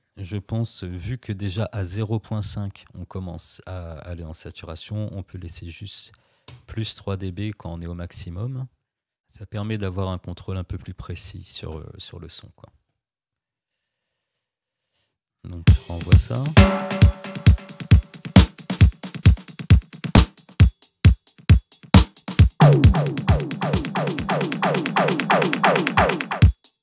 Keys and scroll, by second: 5.3 3, 6.5 Return, 11.6 space, 15.6 space.